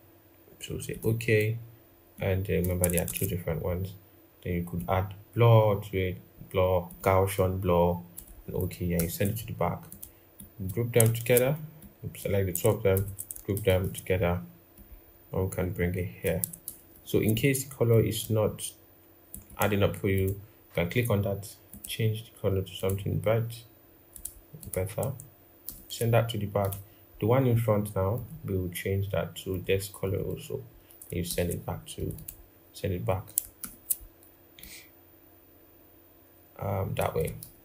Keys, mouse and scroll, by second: 2.8 ctrl+z, 8.7 ctrl+[, 10.1 double click, 11.0 ctrl+z, 13.3 ctrl+-, 13.4 ctrl+-, 16.4 ctrl+=, 16.6 ctrl+=, 16.8 ctrl+=, 19.2 double click, 25.4 ctrl+[, 31.0 ctrl+[, 31.9 double click, 33.4 ctrl+-, 37.2 ctrl+=, 37.5 ctrl+=.